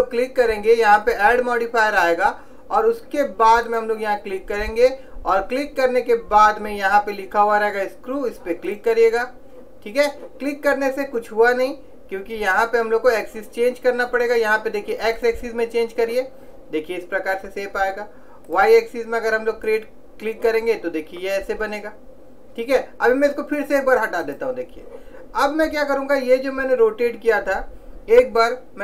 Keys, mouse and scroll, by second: 3.8 click, 12.6 click, 17.8 middle click, 18.7 click, 21.0-24.3 middle drag, 24.3 click.